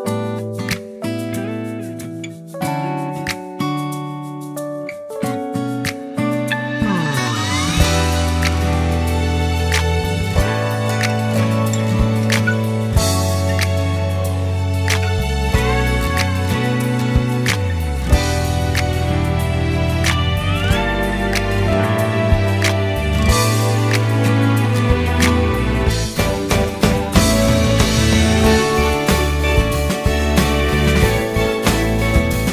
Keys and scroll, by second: 2.2 ctrl+c, 2.4 ctrl+x, 3.0 ctrl+v, 7.9 Up, 8.0 Left, 8.1 Up, 8.1 Left, 11.4 ctrl+3, 11.8 ctrl+3, 12.1 ctrl+s, 13.6 ctrl+z, 18.3-20.5 typing.